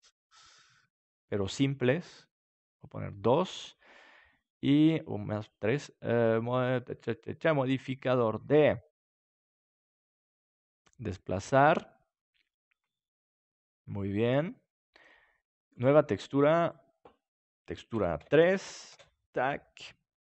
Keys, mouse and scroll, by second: 1.4-4.7 drag, 5.4-7.9 drag, 12.8-14.4 middle drag, 15.7-20.2 drag.